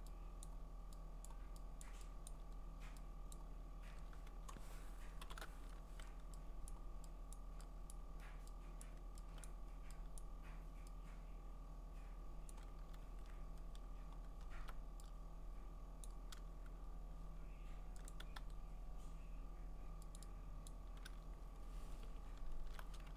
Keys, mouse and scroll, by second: 0.4 click, 1.3 click, 1.8 click, 2.3 click, 3.3 click, 5.2 alt+shift+n, 6.7 click, 7.3 click, 7.9 click, 8.8 click, 9.5 click, 10.2 click, 12.5 click, 13.0-13.5 scroll, 14.1-16.1 scroll, 16.1 click, 18.1 click, 18.4 e, 20.2 click, 20.8 click, 21.4-22.6 scroll.